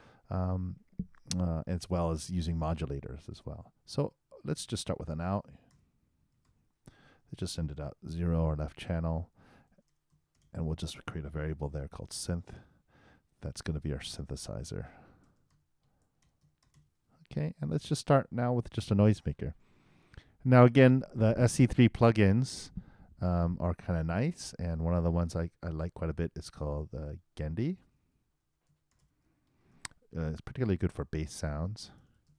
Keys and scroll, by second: 4.4 shift+o, 5.4 shift+u, 6.5-7.4 typing, 10.8 shift+h, 11.3 shift+0, 11.7 shift+;, 28.1 shift+s, 31.7-32.3 typing.